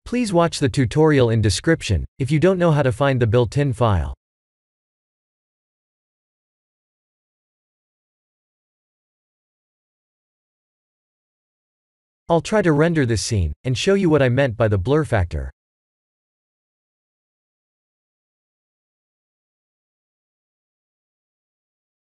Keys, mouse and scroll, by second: 1.8 shift+a, 4.5 s, 5.3 click, 6.5 KP_3, 7.7 g, 7.9 z, 9.5 click, 9.9-12.6 middle drag, 13.2-21.0 middle drag, 21.1-22.0 middle drag.